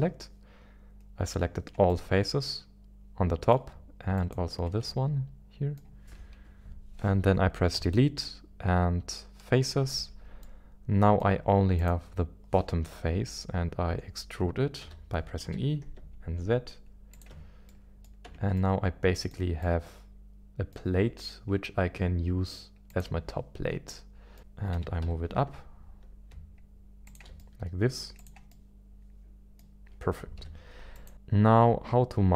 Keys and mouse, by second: 1.9-3.6 middle drag, 4.2 shift+click, 4.9 middle click, 6.3 KP_1, 7.7 Delete, 10.4 middle click, 11.8 click, 12.8 KP_1, 14.8 e, 15.4 z, 17.1 ctrl+click, 17.7 middle click, 18.3 Tab, 18.6 middle click, 19.6-21.3 middle drag, 22.9 click, 23.9-24.4 middle drag, 24.4 KP_1, 24.7 g, 25.0 z, 27.4 middle click, 28.2 click, 28.5-29.6 middle drag, 30.4 z, 31.1-32.3 middle drag.